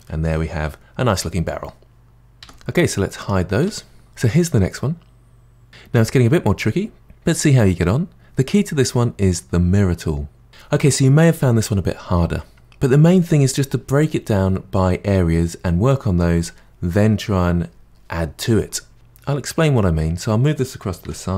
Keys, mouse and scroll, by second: 0.0-1.9 middle drag, 2.4 h, 3.2 click, 3.6 h, 4.1-7.1 middle drag, 19.7-21.0 middle drag, 21.0 g.